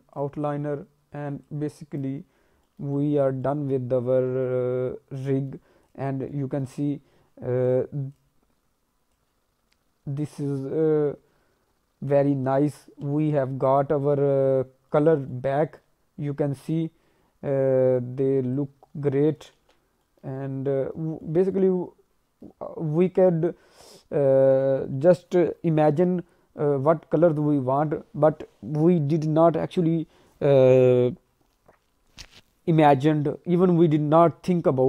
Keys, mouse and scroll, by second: 1.4 click, 2.5 scroll down 1, 2.6 middle click, 2.9 alt+middle click, 3.3 scroll up 1, 3.4 middle click, 4.4 alt+middle click, 5.8 click, 6.2 alt+middle click, 6.8-7.5 scroll up 1, 7.6 click, 8.1 click, 9.1 click, 12.9 ctrl+z, 13.1 scroll down 1, 13.4 alt+middle click, 14.6 scroll up 2, 14.9 middle click, 15.2 alt+middle click, 16.5 click, 18.5 click, 19.6 ctrl+z, 19.8 scroll down 2, 20.0 middle click, 20.3 alt+middle click, 21.0 scroll up 1, 21.2 middle click, 21.5 alt+middle click, 22.8 scroll up 1, 23.0 middle click, 23.8 scroll up 1.